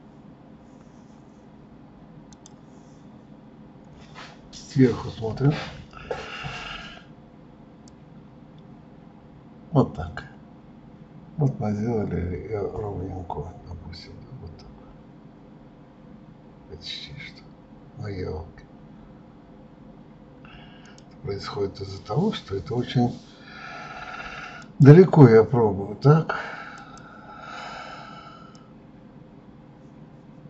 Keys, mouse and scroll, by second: 2.5 click, 5.4 KP_7, 8.0 click, 24.8 click, 26.9 click, 28.7 click.